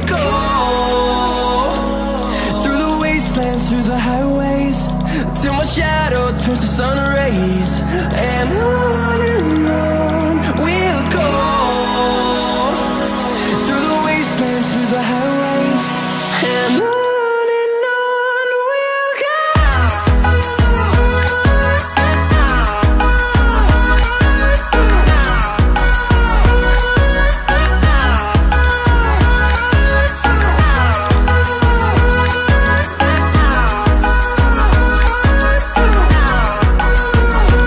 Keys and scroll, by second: 4.0 ctrl+z, 5.9 ctrl+z, 13.5 ctrl+z, 25.6 ctrl+alt+z, 26.7 ctrl+alt+z.